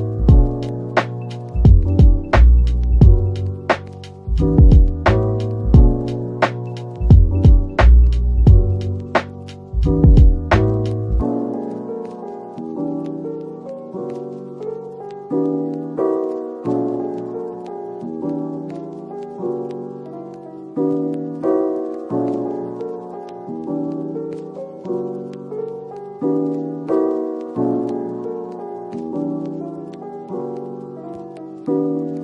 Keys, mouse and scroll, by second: 0.8 middle click, 1.6-2.0 scroll down 1, 2.3 middle click, 6.0 Tab, 6.6 Tab, 15.1-15.5 scroll up 1, 19.0 Tab, 20.3 x, 21.5 middle click, 24.8 scroll down 1, 25.2 middle click, 26.5 Tab, 27.6 scroll up 1, 28.1 Tab, 28.9 3, 29.8 middle click, 30.9 shift+click, 31.7 right click.